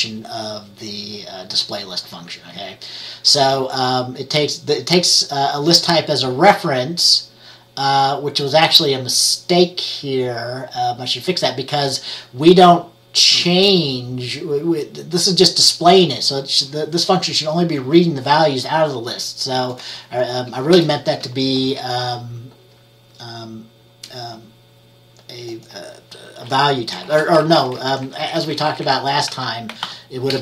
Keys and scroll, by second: 20.9 BackSpace, 27.2 shift+7, 27.7 Left, 27.9 Left, 28.0 Left, 28.2 Left, 28.3 Left, 28.5 Left, 28.6 Left, 28.8 Left, 28.9 Left, 29.2-30.4 typing.